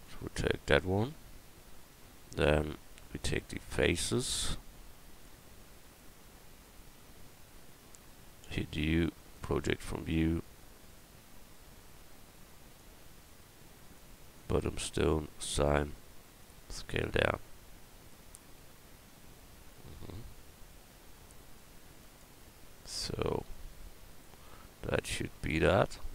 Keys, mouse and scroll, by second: 2.1 Tab, 2.8-4.7 drag, 5.2 click, 8.4 u, 12.8-15.4 drag, 16.4 s, 22.8 Tab.